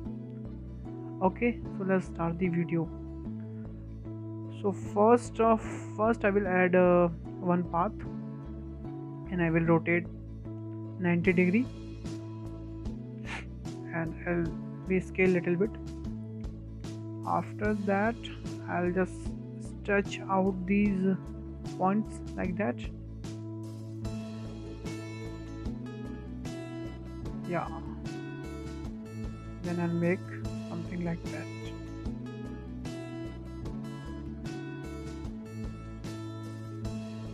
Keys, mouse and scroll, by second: 0.7-1.1 middle drag, 1.1 `, 1.9-2.3 scroll down 2, 2.3 shift+middle click, 2.7-3.1 scroll up 4, 3.1-3.5 shift+middle drag, 3.5-3.8 scroll up 2, 3.8-4.2 shift+middle drag, 4.2 click, 4.7 shift+a, 9.2-9.6 shift+middle drag, 9.6-10.3 scroll up 8, 10.3 shift+middle click, 11.0-12.2 drag, 13.8-14.2 scroll up 2, 14.2-14.9 shift+middle drag, 14.9 s, 16.1-16.5 scroll down 3, 16.5-17.2 shift+middle drag, 17.2 Tab, 17.4-17.8 scroll down 2, 17.8 shift+middle drag, 18.1-18.4 scroll up 3, 18.4-18.9 shift+middle drag, 18.9 click, 19.2-19.5 scroll down 4, 19.8 click, 21.2-21.8 shift+middle drag, 21.8 click, 22.3 click, 23.8-24.7 shift+middle drag, 24.7 click, 25.2 click, 26.1-26.7 shift+middle drag, 26.7 click, 27.1 click, 27.9-28.3 shift+middle drag, 28.3 click, 28.8 click, 30.4 shift+middle click, 31.1 click, 31.6 click, 33.6-34.3 shift+middle drag, 34.3 click, 34.7 click, 35.7-36.1 scroll down 4, 36.1 shift+middle click, 36.7 click, 37.1 click.